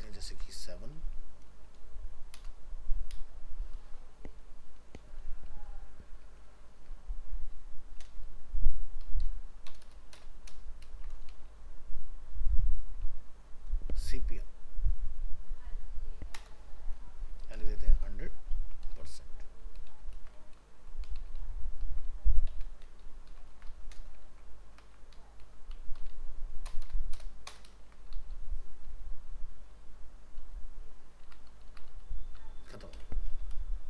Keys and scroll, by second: 0.0 ctrl+shift+Left, 0.3 ctrl+v, 8.2 ctrl+v, 9.7 ctrl+BackSpace, 10.9 ctrl+space, 19.9 ctrl+shift+Left, 20.1 ctrl+c, 21.2 ctrl+shift+Left, 21.4 ctrl+v, 23.5 ctrl+c, 24.2 ctrl+v, 26.7 ctrl+BackSpace, 27.7 ctrl+space.